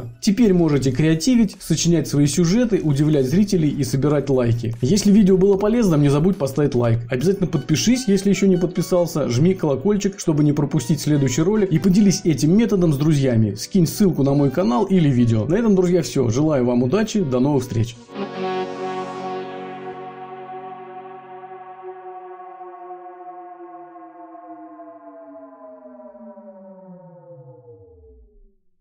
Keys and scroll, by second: 2.4 alt+Delete, 4.5 Return, 9.9 Return.